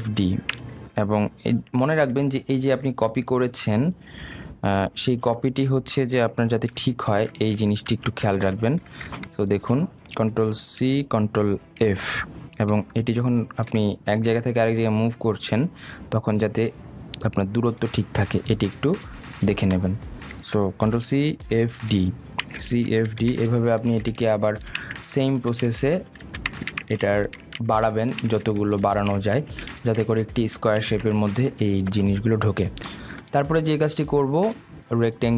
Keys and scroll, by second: 0.4 ctrl+c, 0.7 ctrl+f, 0.9 ctrl+d, 2.8 ctrl+x, 5.6 ctrl+z, 6.9 ctrl+space, 7.7 ctrl+alt+z, 8.8 ctrl+z, 11.8 ctrl+c, 12.7 ctrl+f, 21.8 ctrl+c, 22.4 ctrl+f, 22.6 ctrl+d, 23.5 ctrl+c, 23.9 ctrl+d, 24.2 ctrl+c, 24.5 ctrl+f, 24.7 ctrl+d, 25.0 ctrl+c, 25.4 ctrl+d, 25.7 ctrl+c, 26.0 ctrl+f, 26.3 ctrl+d, 26.8 ctrl+f, 27.1 ctrl+d, 27.4 ctrl+c, 27.7 ctrl+f, 28.0 ctrl+d, 28.3 ctrl+c, 28.6 ctrl+f, 29.1 ctrl+c, 29.5 ctrl+f, 30.0 ctrl+c, 30.4 ctrl+f, 30.6 ctrl+d, 30.9 ctrl+c, 31.2 ctrl+f, 31.4 ctrl+d, 31.8 ctrl+c, 32.1 ctrl+f, 32.3 ctrl+d.